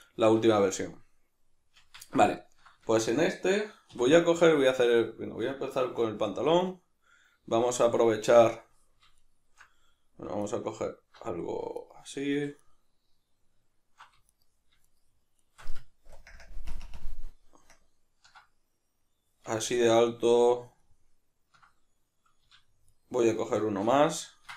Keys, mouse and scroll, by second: 0.0 right click, 1.8 Tab, 2.4-6.6 ctrl+middle drag, 3.9 3, 6.6 alt+right click, 9.2 alt+shift+right click, 10.4 alt+right click, 11.8 alt+right click, 12.6 alt+shift+right click, 14.3 alt+right click, 14.9 alt+shift+right drag, 15.4 alt+shift+right click, 16.1 ctrl+KP_Add, 16.7 ctrl+KP_Subtract, 17.7 ctrl+KP_Add, 19.6-22.8 ctrl+middle drag, 22.8 alt+shift+right click, 23.5 alt+shift+right click, 24.2-24.5 ctrl+middle drag.